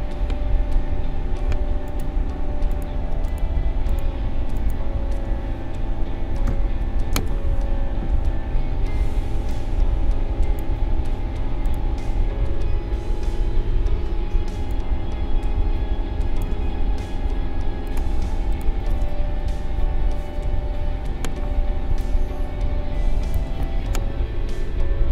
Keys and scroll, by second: 14.5 space, 21.9 space.